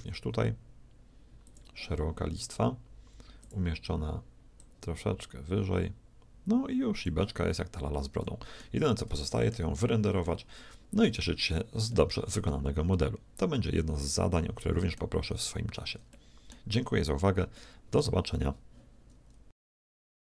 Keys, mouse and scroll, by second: 3.3-6.5 drag, 7.5-9.5 middle drag, 11.2 a, 13.5 middle click, 15.5-19.3 middle drag.